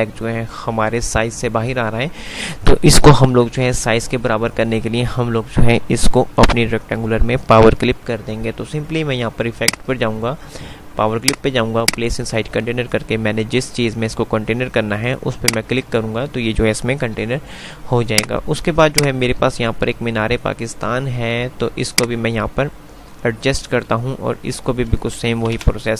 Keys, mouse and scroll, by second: 9.7 click, 15.6 click, 17.2 F3, 18.4-25.6 drag, 18.9-21.1 typing, 25.6 scroll down 1.